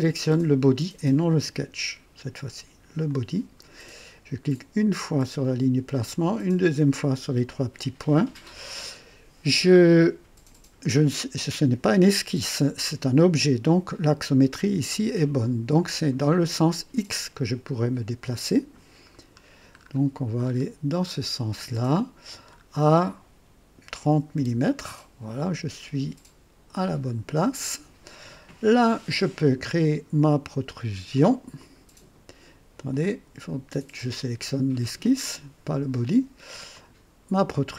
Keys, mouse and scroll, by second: 3.0 click, 4.7 click, 6.6 click, 19.0-19.4 scroll down 2, 19.8 scroll up 2, 20.4 scroll up 2, 21.0-21.8 scroll up 4, 22.4 scroll up 2, 24.1 KP_3, 24.3 KP_0, 26.8 click, 31.5 click, 32.9 click, 34.0 click, 36.7 click.